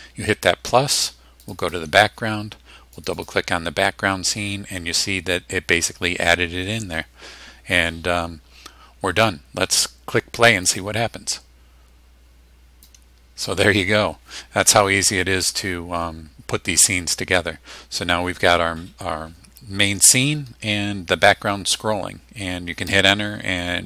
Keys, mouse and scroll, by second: 1.4 click, 3.0 click, 10.7 click, 12.9 click, 22.9 Return.